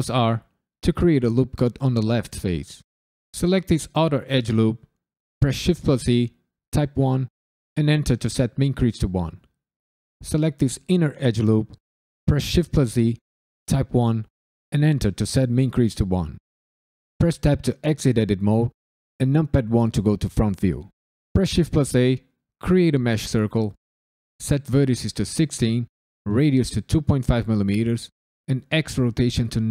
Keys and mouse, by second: 0.9 click, 1.3 right click, 3.2 alt+click, 5.4 shift+e, 6.7 KP_1, 7.7 KP_Enter, 10.2 alt+click, 12.2 shift+e, 13.6 KP_1, 14.7 KP_Enter, 17.1 Tab, 19.2 KP_1, 21.3 shift+a, 23.9-29.7 drag.